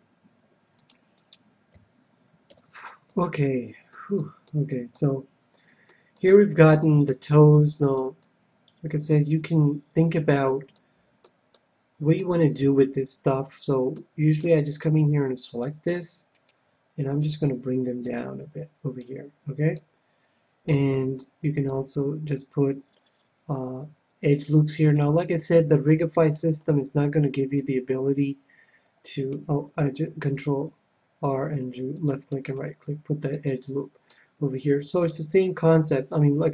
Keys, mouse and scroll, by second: 1.2-3.2 right drag, 1.7 f, 2.5 a, 3.2-9.6 middle drag, 10.7-13.9 middle drag, 14.4 c, 16.4-18.0 right drag, 17.2-18.9 drag, 19.7-21.4 middle drag, 21.7 ctrl+r, 25.3-29.3 middle drag, 30.2 ctrl+r, 33.2 right click, 33.3-34.9 middle drag, 35.0-36.5 drag.